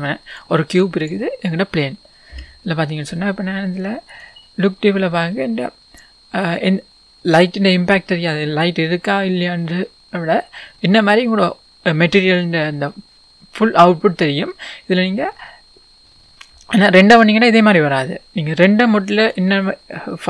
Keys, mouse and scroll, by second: 0.4 click, 4.1 click, 5.0-6.9 scroll down 1, 10.6-12.3 scroll up 1, 16.1-17.6 scroll down 1, 19.2 click.